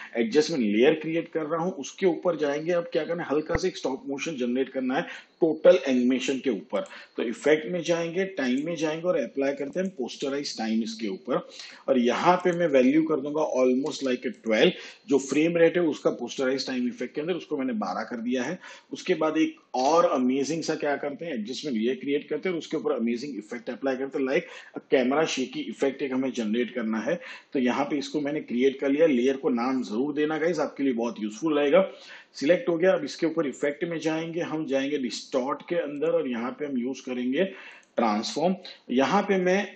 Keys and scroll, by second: 13.7 1, 13.9 2, 19.6 ctrl+alt+y.